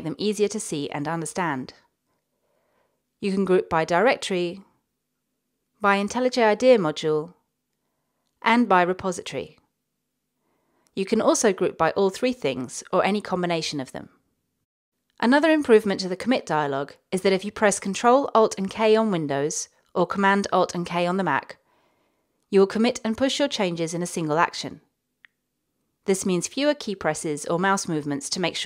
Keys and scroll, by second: 19.0 alt+super+k.